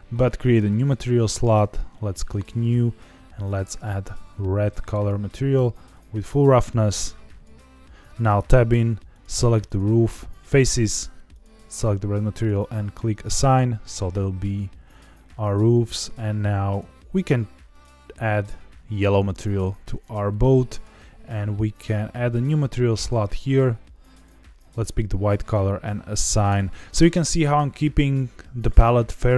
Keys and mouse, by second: 0.4 click, 1.3 click, 6.0-7.4 drag, 8.2 Tab, 8.7 3, 9.1 click, 11.3 click, 12.9 Tab, 16.7 click, 17.8-19.3 drag, 20.2 Tab, 22.2 click, 23.2 click, 26.4 click, 26.8 Tab.